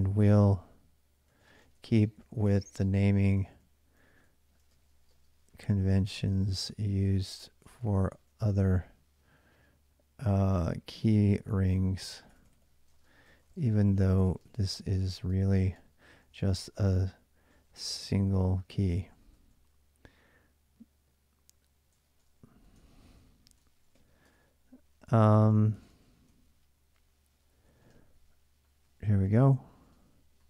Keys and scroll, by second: 0.0-8.7 typing, 10.1-19.6 typing, 21.6-30.4 typing.